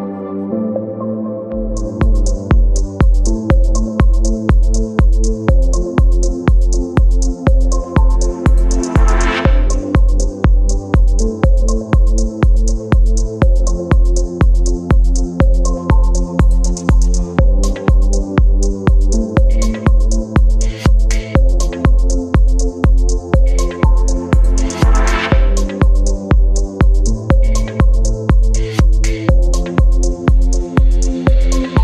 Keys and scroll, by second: 14.9 space, 26.9 Delete.